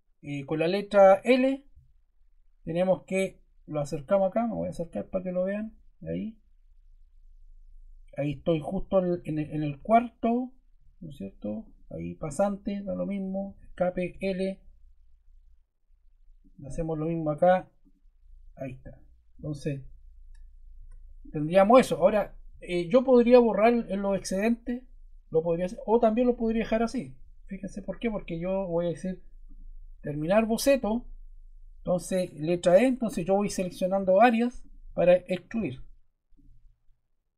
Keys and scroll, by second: 13.4 Escape, 14.0 l, 20.7 Escape, 32.4 e.